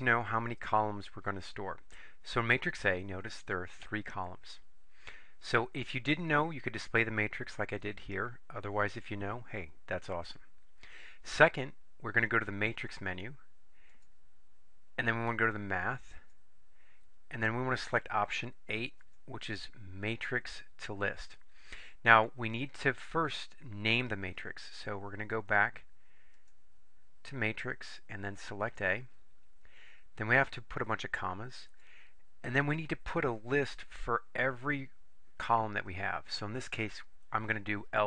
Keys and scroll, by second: 16.3 Right, 19.1 8, 28.8 Return, 31.8 ,.